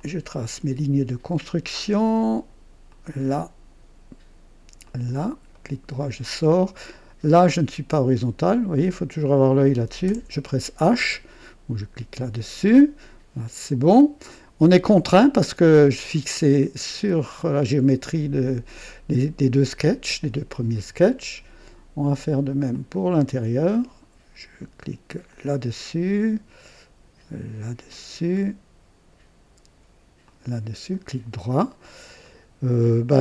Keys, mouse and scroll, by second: 2.8 click, 4.8 click, 5.5 right click, 7.2 right click, 8.4 click, 10.0 h, 22.7 click, 25.3 click, 27.9 click, 30.2 click, 30.9 right click, 31.8 scroll up 2, 32.2 right click.